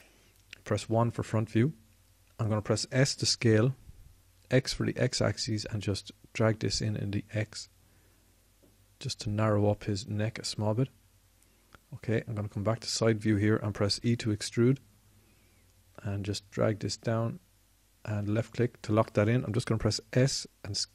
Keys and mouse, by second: 1.2 KP_1, 3.3 s, 9.9-12.9 drag, 14.4 e, 19.9 s.